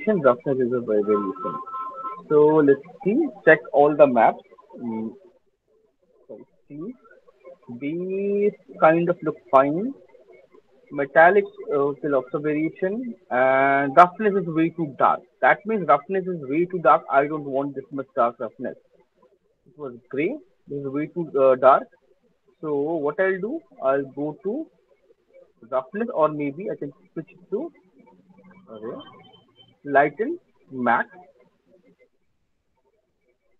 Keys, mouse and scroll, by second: 0.4 scroll, 3.5 alt+click, 3.8-4.8 alt+scroll, 5.1 m, 6.9 c, 7.5 alt+middle click, 9.8 c, 12.8 c, 19.4 click, 19.8 click, 20.4 click, 24.2 click, 26.9 click, 27.5 click, 28.1 click, 31.4 click.